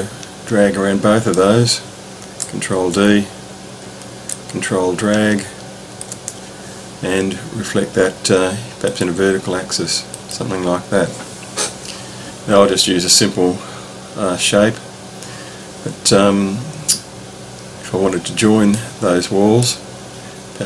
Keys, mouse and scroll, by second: 2.7 ctrl+d, 4.4-5.5 ctrl+drag, 8.8 click, 10.1 click, 18.7 middle click.